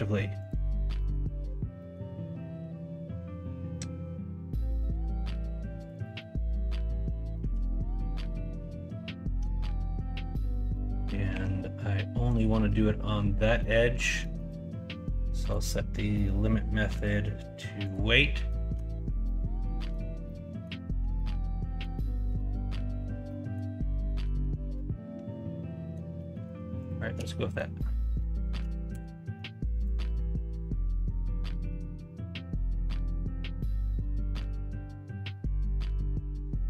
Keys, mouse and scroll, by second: 0.9 middle click, 1.7 middle click, 7.3 middle click, 7.9-9.4 middle drag, 9.6 middle click, 10.1 Tab, 10.5 middle click, 11.3 q, 13.6 middle click, 14.2 shift+middle click, 18.3 middle click, 18.7 Tab, 19.2-19.9 middle drag, 20.2 middle click, 21.1 middle click, 23.2 middle click, 24.0 middle click, 24.7-25.9 middle drag, 26.2 middle click, 27.3 middle click, 29.0 ctrl+KP_Subtract, 30.1-34.3 middle drag, 36.5-36.6 middle drag.